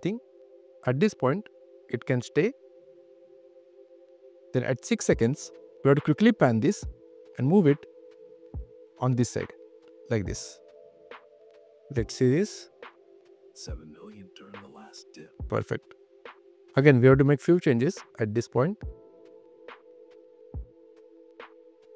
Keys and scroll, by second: 19.4 super+q, 20.4 space.